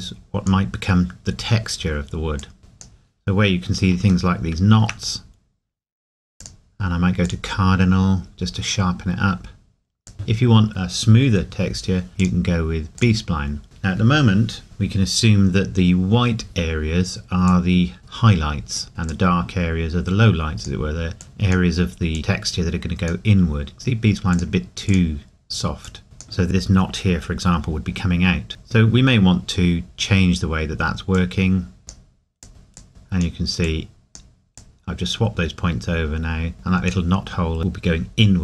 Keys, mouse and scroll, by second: 4.3 shift+middle click, 5.2-6.4 scroll up 1, 6.4 click, 10.1 click, 12.2 click, 17.5 click, 28.5 click, 31.2 click.